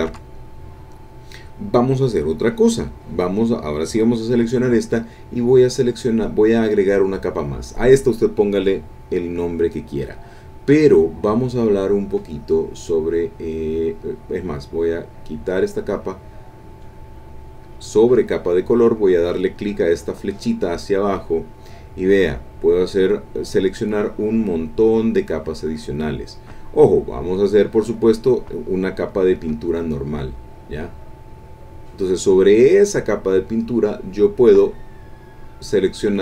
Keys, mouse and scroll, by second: 0.1 5, 3.8 click, 6.6 click, 15.5 click, 17.9 click, 30.6 click, 33.8 click.